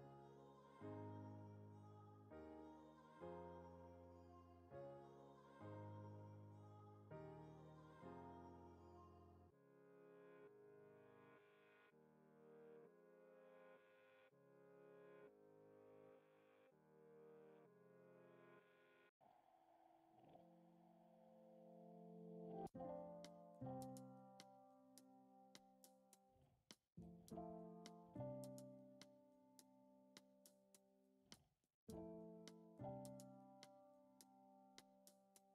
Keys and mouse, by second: 1.0 l, 3.3 shift+d, 5.5 shift+d, 7.3 l, 7.8 l, 9.0 shift+d, 10.1 click, 10.7 s, 12.0 g, 12.0 shift+d, 13.5 ctrl+Tab, 14.5-15.6 drag, 15.6 ctrl+Tab, 16.6 click, 17.7 Tab, 18.3 alt+z, 20.0 shift+click, 21.3 shift+click, 21.5 shift+click, 22.6 shift+click, 23.1 shift+click, 23.4 shift+click, 23.8 shift+click, 25.0 click, 25.7 ctrl+Tab, 26.9 alt+z, 28.9 alt+z, 28.9 click, 29.9 click, 30.8 Tab, 31.8 alt+z, 32.4 a, 33.6 ctrl+a.